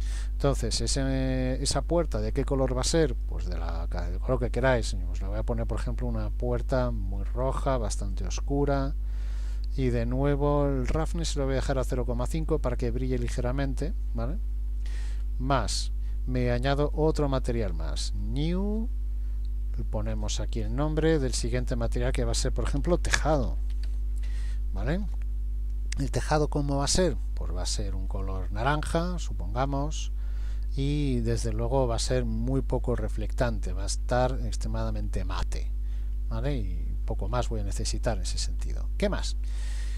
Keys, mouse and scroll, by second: 0.9-1.5 scroll down 1, 1.5 scroll down 2, 3.1 click, 9.5-10.9 scroll down 1, 15.2-16.3 scroll up 7, 16.9 click, 16.9 scroll up 1, 18.2 click, 20.1 click, 27.5-28.1 scroll down 1, 28.1 click, 28.1 scroll down 1, 31.6 click, 34.9-36.1 scroll down 4, 36.1-37.3 scroll up 3, 37.3 scroll up 3, 38.1-38.9 scroll up 1, 39.9 click.